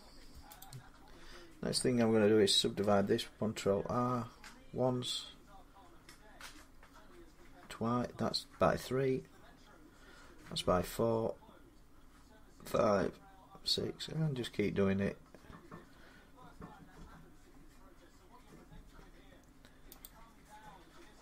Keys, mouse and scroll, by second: 0.4 click, 2.4 ctrl+r, 6.4-7.4 scroll up 1, 8.6-9.3 scroll down 2, 9.3-10.9 scroll up 1, 10.9-12.6 scroll up 1, 12.6 scroll up 2, 13.5 scroll, 14.6-15.2 scroll, 15.2-15.8 scroll, 15.8 scroll, 16.7-18.0 scroll, 18.0-19.7 scroll, 19.8 click.